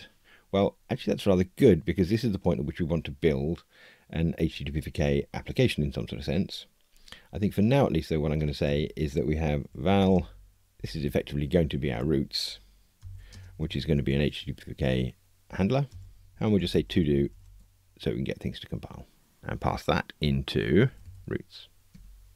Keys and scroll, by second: 15.9 Return, 21.9 Tab.